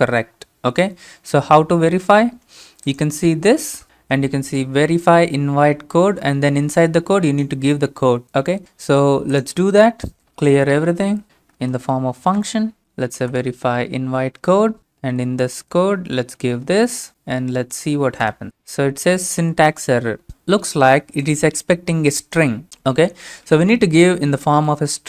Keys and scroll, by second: 10.3-15.1 typing, 16.3-17.0 typing, 18.3 Return.